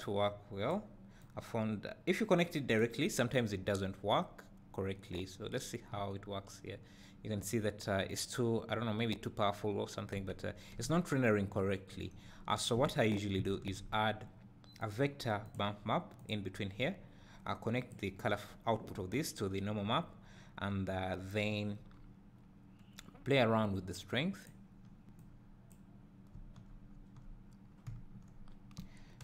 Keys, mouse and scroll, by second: 1.1 click, 2.1-9.5 drag, 6.0 `, 15.5-18.2 drag, 15.9 shift+a, 20.2-21.9 scroll up 1, 23.5-28.4 drag, 26.5 Tab, 27.7-28.4 scroll down 2, 28.4 `.